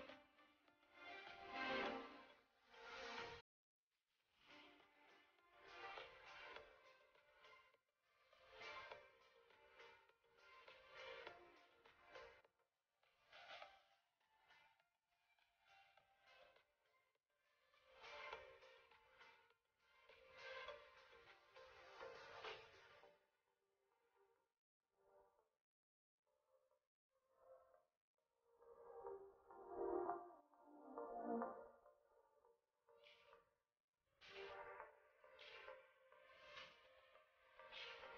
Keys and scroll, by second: 1.2 shift+space, 2.3 ctrl+shift+], 9.3 shift+space, 15.5 ctrl+shift+], 25.8 shift+space, 33.2 ctrl+[.